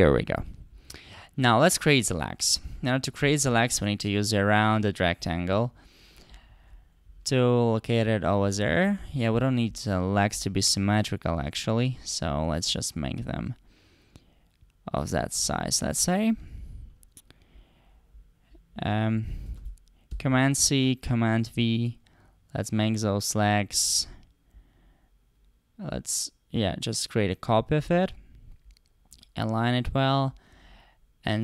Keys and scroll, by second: 19.5 super+c, 20.1 super+v.